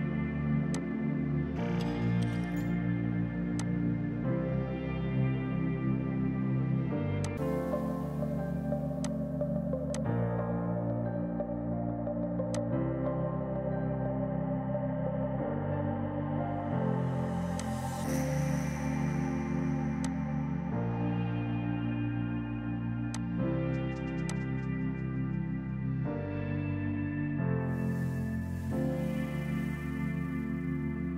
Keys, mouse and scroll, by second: 2.9 space, 3.7 alt+click, 4.6 Delete, 7.3 click, 12.6 click, 17.7 click, 23.2 alt+click, 24.4 click, 28.5 space.